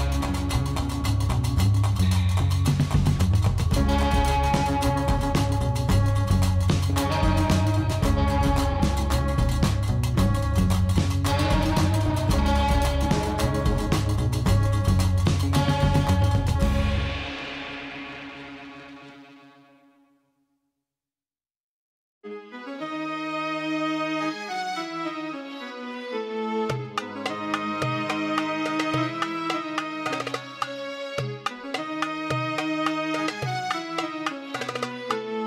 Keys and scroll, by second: 1.2 1, 2.2 shift+z, 8.6 g, 9.1 z, 12.0 shift+z, 14.5 0.